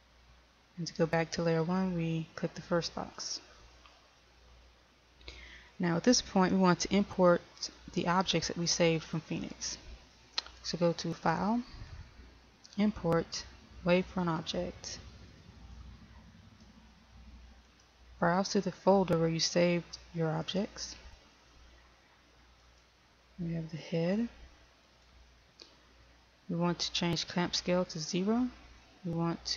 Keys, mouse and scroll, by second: 6.5-29.5 drag.